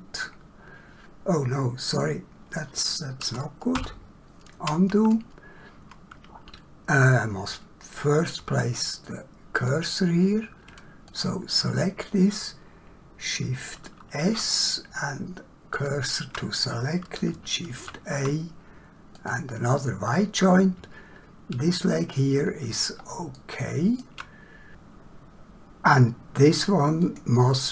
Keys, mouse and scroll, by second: 3.7 ctrl+z, 11.1 click, 14.3 shift+s, 15.7 shift+click, 17.7 shift+a, 19.1 click, 27.0 click.